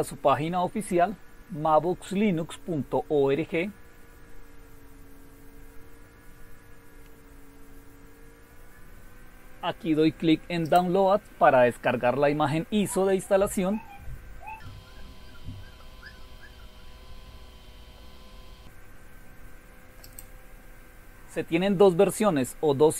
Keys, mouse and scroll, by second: 1.1-1.8 scroll down 4, 2.9-3.7 scroll down 2, 4.0-5.7 scroll down 2, 5.7-6.8 scroll down 4, 7.3-7.9 scroll down 2, 7.9 scroll down 1, 8.0-10.3 scroll up 3, 10.6 click, 15.4-16.7 scroll down 2, 20.0 click, 20.3 click, 22.6-22.9 scroll down 2.